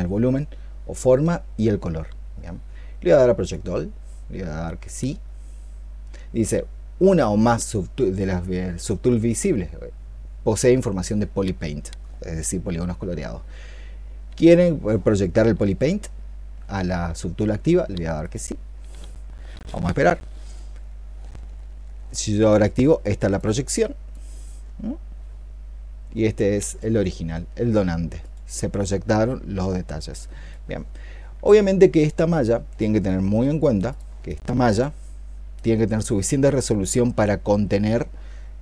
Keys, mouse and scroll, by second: 34.1 double click, 35.8 double click.